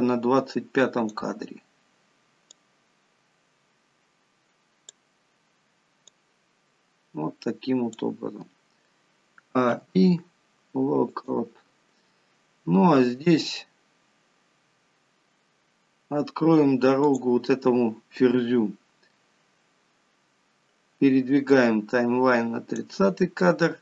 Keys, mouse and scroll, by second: 2.8 click, 6.3 click, 9.6 a, 10.0 i, 17.3 click, 21.8 click.